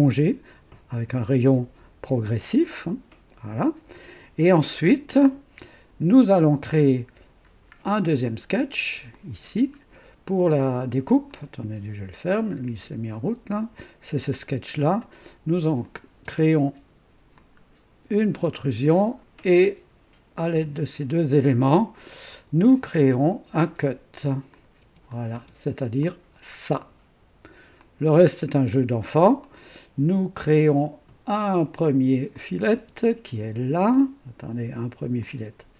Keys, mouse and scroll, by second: 5.2-6.4 drag, 7.5 scroll down 1, 8.2 click, 9.1 click, 11.3 click, 15.8 click, 16.2 space, 17.3-19.4 drag, 23.3 click, 23.8 space, 24.5 click, 24.8-25.4 typing, 25.1 click, 26.0 click, 26.5 typing, 27.8-28.9 drag, 28.6 typing, 29.4 click, 32.3 click, 32.7 typing, 33.8 space, 35.2 click.